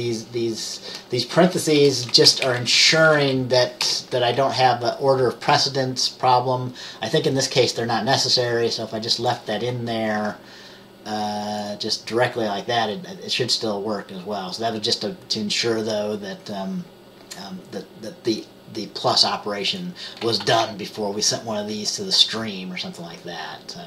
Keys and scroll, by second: 1.9 BackSpace, 3.9 BackSpace, 4.5 Up, 20.5 ctrl+s.